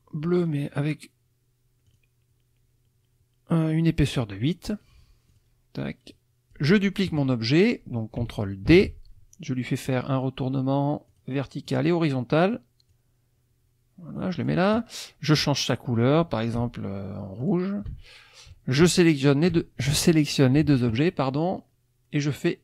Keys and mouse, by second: 0.4 right click, 1.9 click, 5.3 click, 6.1 click, 8.7 ctrl+d, 11.1 click, 11.6 click, 12.9-14.6 drag, 17.4 shift+click, 19.1 shift+click, 22.2 click.